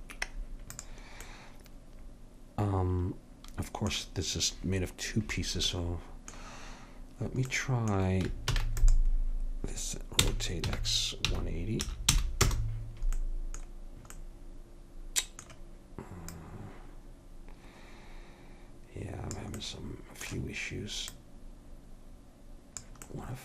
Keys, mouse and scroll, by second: 0.9-2.7 drag, 2.7 middle click, 5.8-7.7 middle drag, 8.6 shift+d, 10.3 r, 16.4-18.4 drag, 19.7-21.3 middle drag, 21.3-23.2 drag, 23.2 right click, 23.2-23.4 middle drag.